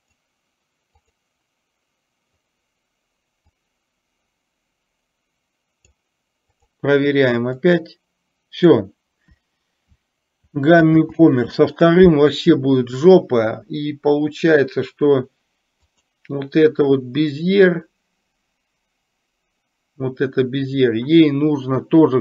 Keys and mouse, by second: 0.1 click, 1.1 click, 3.6-6.1 drag, 6.6 click, 7.8-8.8 drag, 11.0 ctrl+z, 15.8 click.